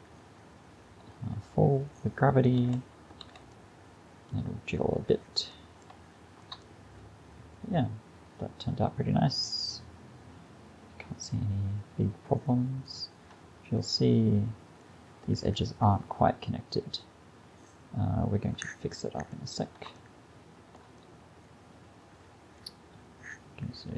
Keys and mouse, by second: 2.6 alt+a, 3.3 alt+a, 3.6-4.9 drag, 13.3-19.1 middle drag, 19.3 middle click, 19.4 middle click.